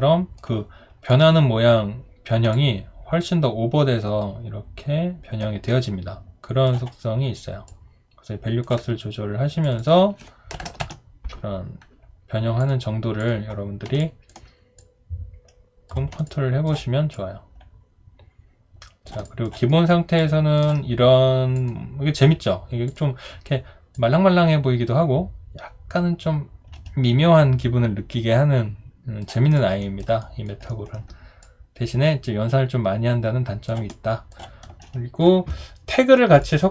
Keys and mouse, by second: 10.6-11.3 typing, 14.0 alt+click, 16.2 alt+click, 19.2 alt+click, 19.7 alt+right click, 20.2 alt+click, 29.6 alt+click, 30.2 alt+right click, 30.7 alt+middle click, 33.9 alt+click.